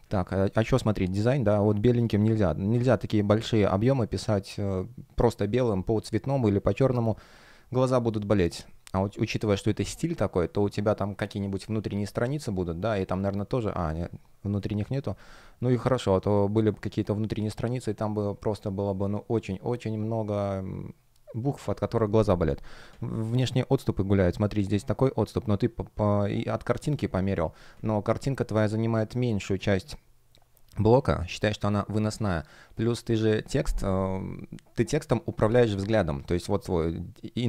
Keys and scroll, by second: 23.2 F1.